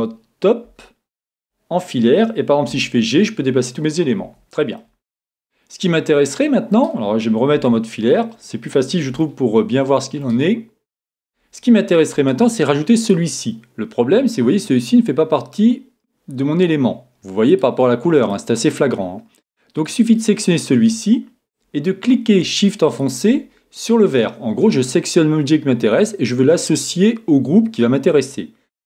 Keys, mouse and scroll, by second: 0.7 z, 2.7 g, 4.8-6.7 middle drag, 7.6 z, 8.1-13.0 middle drag, 13.0-14.9 right drag, 17.5-19.4 right drag, 18.2-20.0 drag, 19.9-21.8 right drag, 23.0-24.9 right drag.